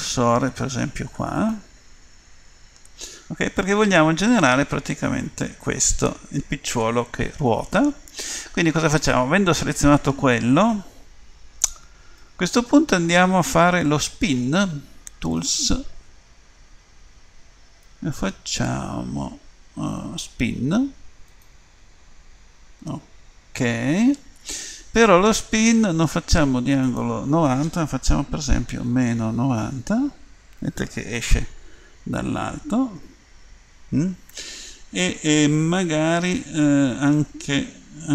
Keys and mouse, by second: 1.4-14.1 drag, 15.3-24.8 drag, 26.9-29.9 drag.